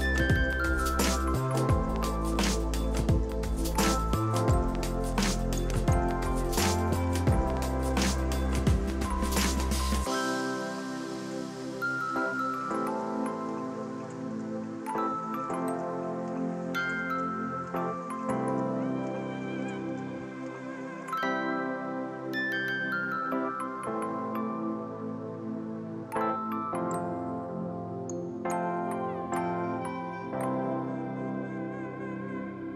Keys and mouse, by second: 2.1 c, 2.7 6, 3.3 ctrl+q, 3.4 click, 4.0 c, 4.3 click, 5.3-7.2 typing, 6.0 click, 6.8 ctrl+e, 7.2 click, 10.5 ctrl+1, 10.8 click, 11.0 right click, 11.1 click, 11.7 right click, 13.0 click, 13.3 right click, 13.4 click, 13.5 right click, 13.8 click, 15.9 right click, 16.2 click, 19.1 click, 20.2 ctrl+click, 20.7 ctrl+click, 21.1 ctrl+click, 21.8 ctrl+click, 24.4 click, 24.6 KP_4, 25.7 click, 26.5 ctrl+1, 26.8 click, 27.2 click, 29.7 ctrl+click, 31.4 ctrl+1, 31.5 click.